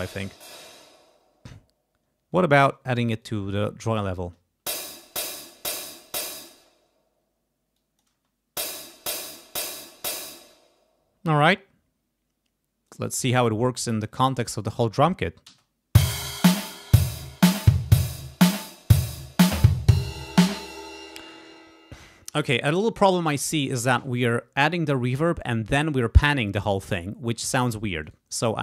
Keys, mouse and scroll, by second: 0.5 space, 2.3 click, 3.2-4.2 drag, 4.2 space, 6.5 space, 7.7 click, 8.1 space, 10.4 space, 12.9 click, 13.9 click, 14.7 click, 15.5 space, 20.5 space, 28.0 right click.